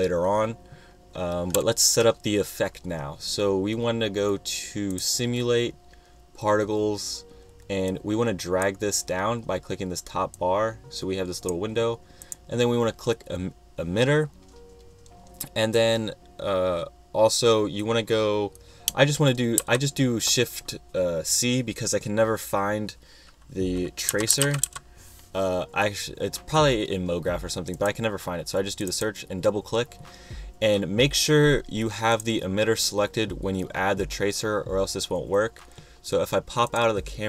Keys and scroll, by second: 19.9 shift+c, 24.1-25.4 typing.